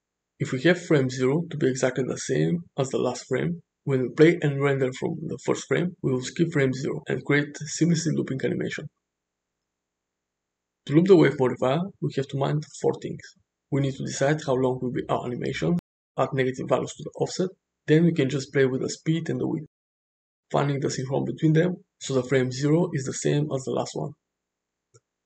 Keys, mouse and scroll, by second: 13.4-13.9 shift+middle drag, 20.3-23.8 drag.